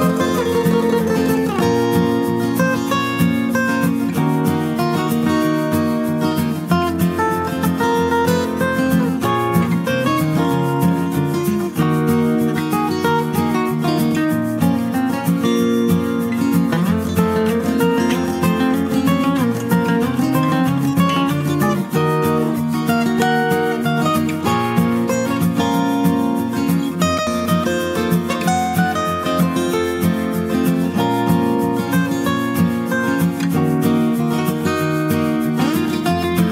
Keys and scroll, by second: 7.5 typing, 8.8-9.5 typing.